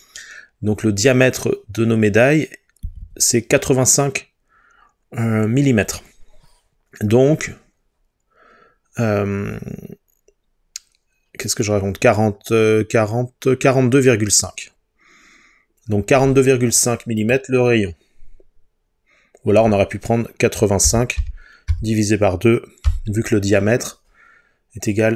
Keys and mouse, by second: 17.2-25.1 drag.